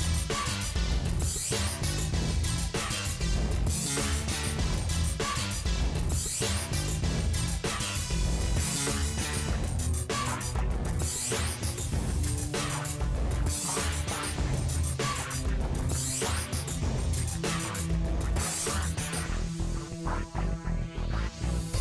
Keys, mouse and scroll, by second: 1.5 middle click, 2.2 g, 2.6 shift+middle click, 2.8-3.3 scroll up 1, 3.3 KP_Decimal, 3.5 scroll down 3, 3.7 middle click, 4.4 KP_3, 4.6 KP_1, 5.3 r, 6.4 g, 6.8-7.5 scroll up 5, 6.9 shift+middle click, 7.5-8.7 shift+middle drag, 8.7 g, 9.6 r, 11.0 g, 11.6 middle click, 11.8-12.2 scroll down 5, 12.2 s, 13.0 KP_1, 13.3 scroll up 3, 13.5 s, 13.9 g, 14.9 middle click, 15.2 scroll down 11, 15.4 middle click, 15.8 click, 16.0 ctrl+s, 16.2 shift+middle click, 16.5 scroll down 1, 16.6-21.8 shift+middle drag.